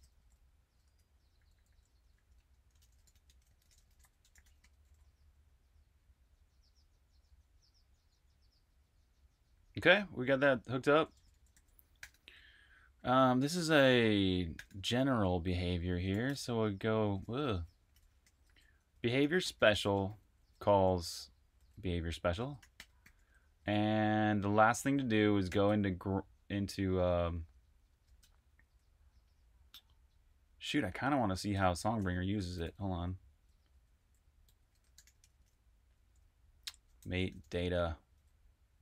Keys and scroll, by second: 0.0-5.6 typing, 9.5-11.4 typing, 12.9-23.3 typing, 25.2-25.9 typing, 28.1 Escape, 31.5 super+`, 32.2-35.4 typing, 36.7-37.8 typing.